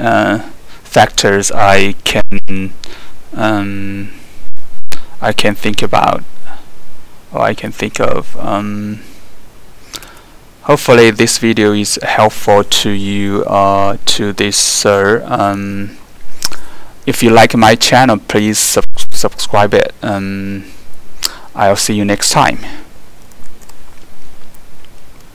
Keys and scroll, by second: 23.4 alt+4.